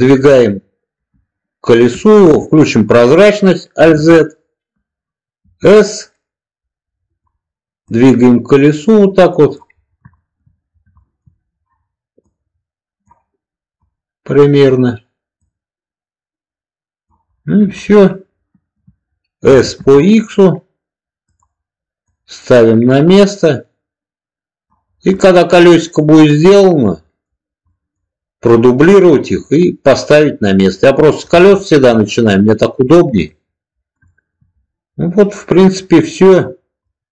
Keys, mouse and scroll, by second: 3.7 alt+z, 5.3 s, 7.0 click, 7.8-9.4 drag, 10.1 shift+middle click, 11.0 shift+middle click, 12.1 click, 13.7 click, 15.4 click, 17.7-18.8 middle drag, 19.4 s, 19.7 x, 21.1 click, 22.0-24.6 drag, 25.2-27.2 middle drag, 27.7 middle click, 29.1 middle drag, 29.9-31.1 middle drag, 31.5 shift+middle drag, 32.8 middle click, 34.0 shift+middle click, 36.8-37.1 middle drag.